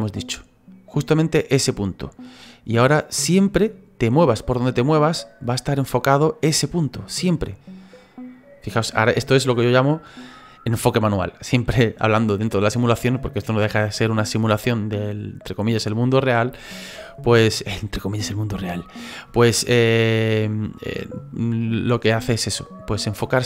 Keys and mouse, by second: 0.3 click, 2.1 click, 3.0 click, 3.6 click, 4.5 click, 5.2 click, 6.3 click, 7.0 click, 8.0 click, 8.7 click, 16.6 click, 19.8 click, 20.4 click, 21.9 click.